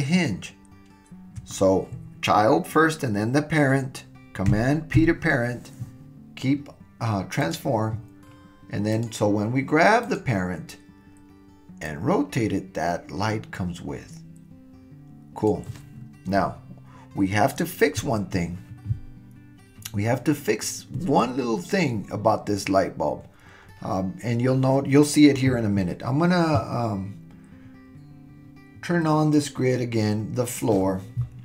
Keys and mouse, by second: 5.0 super+p, 8.9 click, 11.8 click, 13.1-15.5 middle drag, 18.0 super+z, 29.3 click.